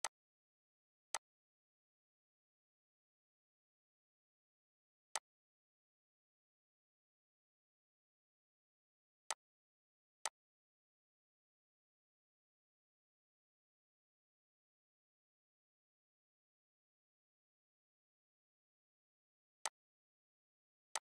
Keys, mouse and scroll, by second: 4.4 click, 9.3 click, 19.7-21.1 drag.